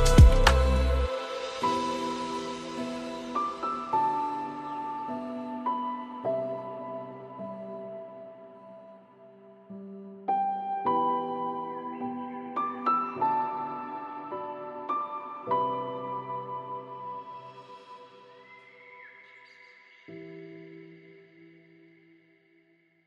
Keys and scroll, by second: 20.3 ctrl+space.